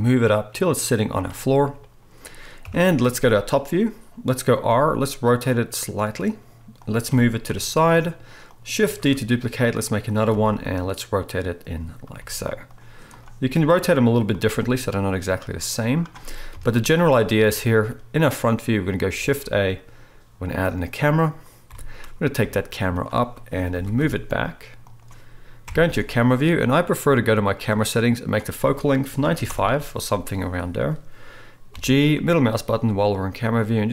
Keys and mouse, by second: 1.2-8.8 middle drag, 2.6 KP_7, 4.7 r, 7.1 g, 9.1 shift+d, 10.3 r, 12.2 g, 13.1 click, 13.6 r, 14.5 g, 16.5 KP_1, 17.5 shift+middle click, 19.2 shift+a, 19.5-21.1 middle drag, 21.7 g, 21.8-28.3 middle drag, 23.7 g, 25.6 KP_0, 28.3-33.9 drag, 31.7 g.